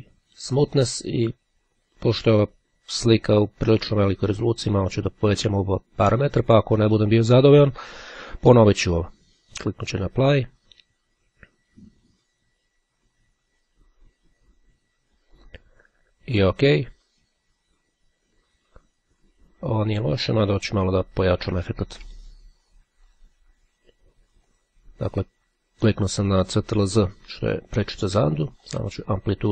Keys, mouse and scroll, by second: 4.5-5.6 drag, 5.9 click, 9.5-10.7 drag, 15.1-16.1 drag, 20.9 ctrl+z, 23.3 click, 24.6 click, 28.6-29.5 drag.